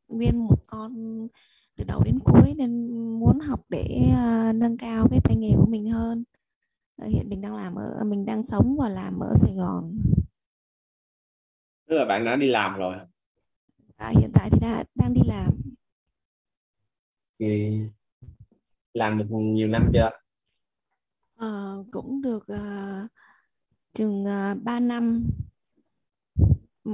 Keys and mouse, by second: 10.8 click, 16.0 click.